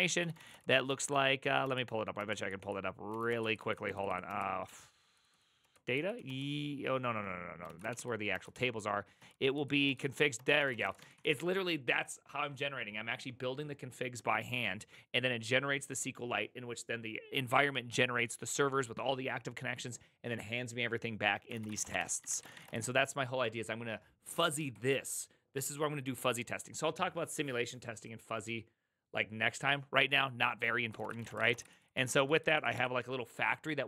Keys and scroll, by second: 0.1-11.8 typing, 1.6 Return, 9.2 Return, 9.8 Return, 10.3 Return, 21.4-22.5 typing, 22.4 Return, 22.6 Return, 30.8-32.7 typing.